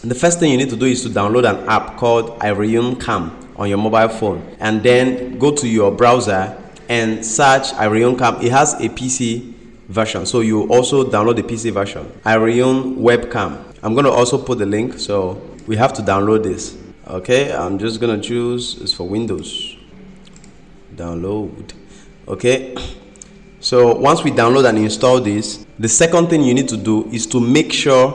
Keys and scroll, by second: 6.0 ctrl+m, 15.5 ctrl+m.